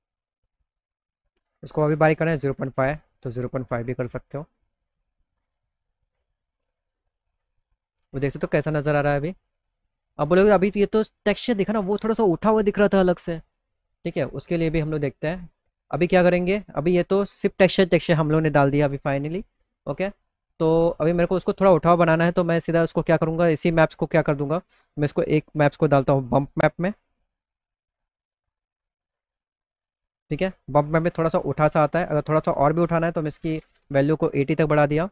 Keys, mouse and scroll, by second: 0.3 click, 1.3 KP_0, 3.2 middle click, 3.6 middle click, 3.9-5.5 alt+middle drag, 6.3 click, 7.0 click, 7.3 middle click, 7.6 middle click, 8.1-9.8 middle drag, 10.4 middle click, 10.8 middle click, 11.1 middle click, 12.8 middle click, 12.9 middle click, 13.2 middle click, 15.0 click, 20.0 click, 21.5 click, 23.9-25.8 drag, 27.1 click, 28.2 click, 28.4 click, 31.9 click.